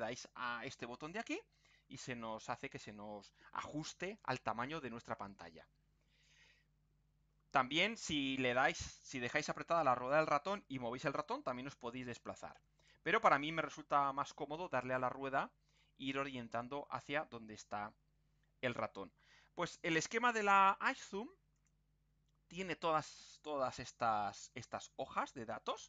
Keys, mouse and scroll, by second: 1.0 click, 7.0-7.6 scroll up 1, 8.0 scroll down 1, 10.2-14.2 middle drag, 14.4-14.8 scroll down 2, 15.3-16.0 scroll up 2, 16.4-17.0 scroll down 4, 17.4-17.7 scroll up 2, 17.9 scroll down 2, 18.4-18.7 scroll up 2, 18.9-19.2 scroll down 2, 21.6 click.